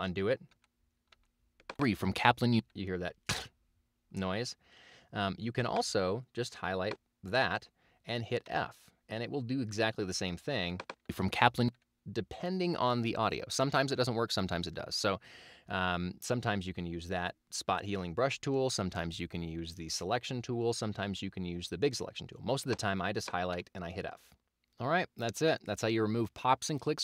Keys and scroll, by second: 0.5 super+z, 1.8 super+space, 8.5 f, 11.1 space, 23.6 f.